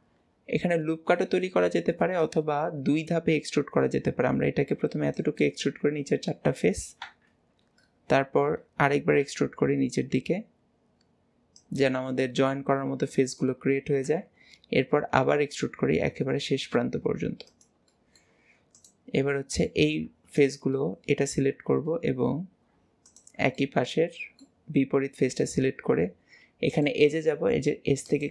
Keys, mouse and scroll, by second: 1.1-1.6 scroll up 1, 2.2 click, 7.0 KP_1, 8.2-9.2 scroll up 1, 9.2 e, 12.2-14.1 middle drag, 14.1 KP_1, 18.0 middle click, 18.8 click, 19.2-20.4 middle drag, 20.4 click, 20.8-22.0 middle drag, 22.0 scroll up 1, 23.0 click, 23.6-24.7 middle drag, 24.7 scroll down 1, 26.8-28.3 drag.